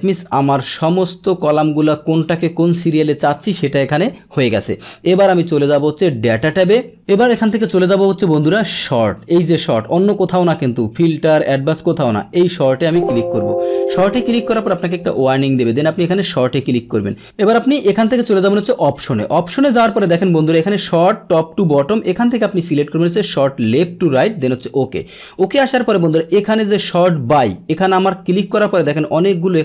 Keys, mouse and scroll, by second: 0.3-1.8 drag, 6.3 click, 12.7 click, 14.7 click, 16.0 click, 17.1 click, 18.7 click, 23.7-24.5 drag, 27.7 click, 28.8-29.6 drag.